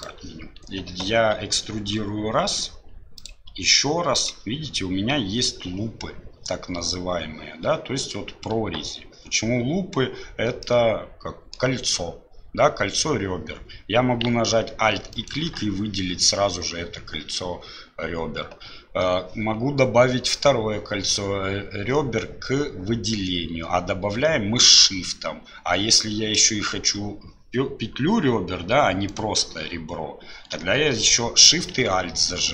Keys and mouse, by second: 10.6-11.8 drag, 15.1 alt+click.